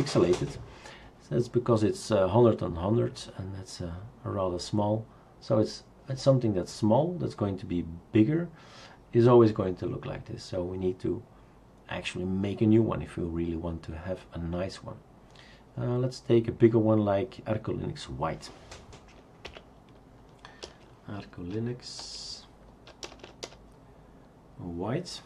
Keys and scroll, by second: 19.5 Up, 20.6-23.2 typing.